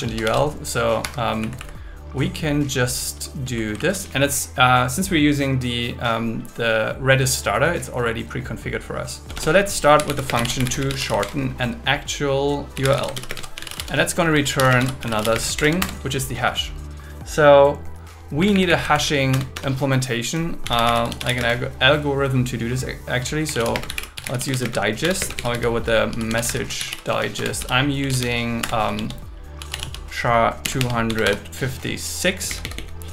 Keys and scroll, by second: 0.0 super+1, 1.0 Escape, 1.4 Right, 3.5 Right, 9.2 Return, 10.3 space, 11.2 shift+8, 13.3-15.6 typing, 15.8 Return, 18.4 Up, 18.9 super+Right, 19.3 Return, 21.4 space, 23.7-25.4 typing, 26.8 shift+d, 27.4 Return, 28.0 Return, 28.6 Return, 28.9-30.9 typing, 32.5 Down.